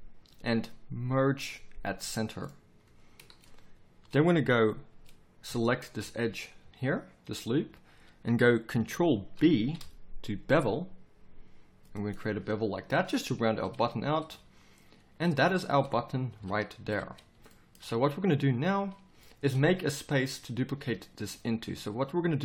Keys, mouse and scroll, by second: 3.2-6.3 middle drag, 6.6 z, 7.4 z, 9.3 ctrl+b, 13.5 middle click, 14.3 z, 16.3 KP_7, 16.8 z, 19.4 middle click.